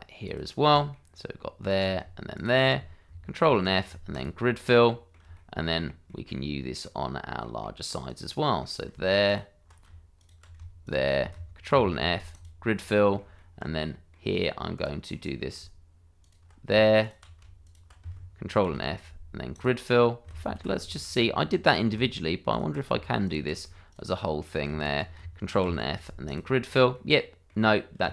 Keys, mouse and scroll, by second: 0.2 ctrl+click, 0.7 shift+middle click, 1.6 shift+click, 2.8 ctrl+click, 3.4 ctrl+f, 4.1 click, 4.9 middle click, 5.3 shift+middle click, 5.8 scroll down 1, 6.0 middle click, 8.0 click, 8.4 middle click, 9.2 ctrl+click, 10.2 shift+click, 10.8 ctrl+click, 11.7 ctrl+f, 12.3 click, 12.9 middle click, 13.3 shift+middle click, 13.8 middle click, 14.7 click, 15.1 middle click, 16.2 ctrl+click, 17.0 shift+click, 17.6 ctrl+click, 18.6 ctrl+f, 19.5 click, 20.4 ctrl+z, 21.6 click, 22.5 ctrl+click, 23.2 shift+click, 23.9 ctrl+click, 24.8 shift+click, 25.6 ctrl+f, 26.2 click, 26.9 middle click.